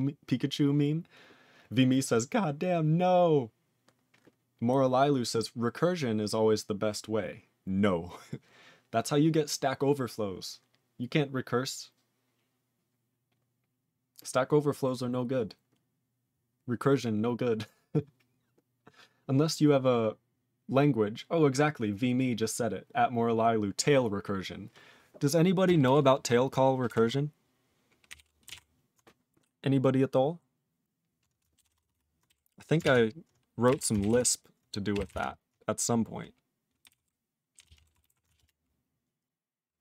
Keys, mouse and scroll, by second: 27.0 ctrl+s, 28.1 ctrl+n, 38.4 ctrl+Return.